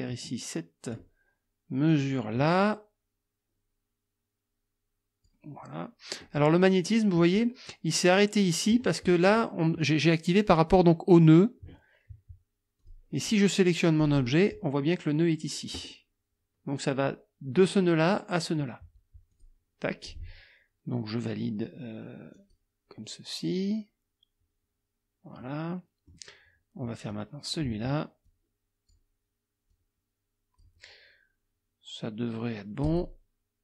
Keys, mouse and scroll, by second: 1.9-5.4 drag, 6.2 middle click, 12.8 click, 14.0 click, 19.3 click, 22.4 click, 25.4 click, 27.1 click, 28.3 click, 29.7 click, 32.8 click.